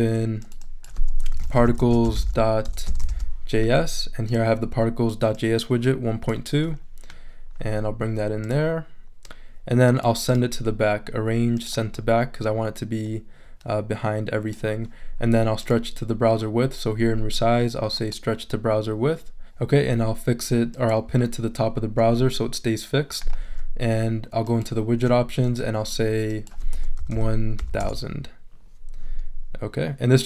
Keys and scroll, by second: 1.1-3.6 typing, 26.7 l, 27.0 o, 27.8 Return.